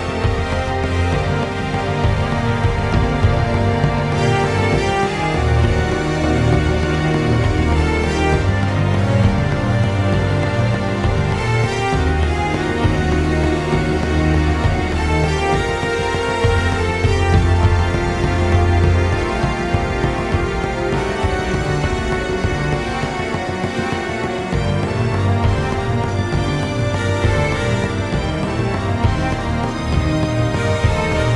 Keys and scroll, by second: 0.4 ctrl+z, 0.5 ctrl+z, 0.6 ctrl+z, 0.7 ctrl+z, 20.5-21.7 typing, 23.1-24.3 ctrl+z, 30.1 ctrl+z, 30.1 ctrl+z, 31.2 ctrl+z.